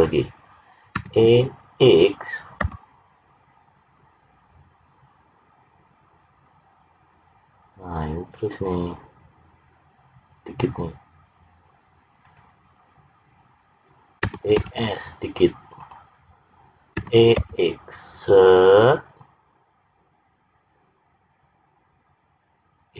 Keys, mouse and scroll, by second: 0.9 e, 14.2 e, 16.9 e.